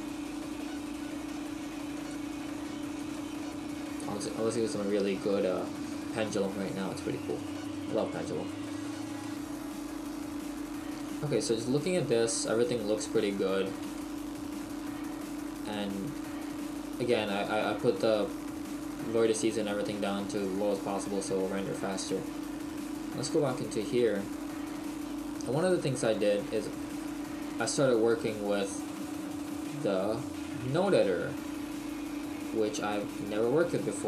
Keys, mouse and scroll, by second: 1.9 click, 7.4 middle click, 8.8 scroll up 1, 9.1 shift+middle click, 10.9 middle click, 12.8-14.1 scroll up 1, 14.1 shift+middle click, 17.1 shift+middle click, 23.5 click, 27.6 right click.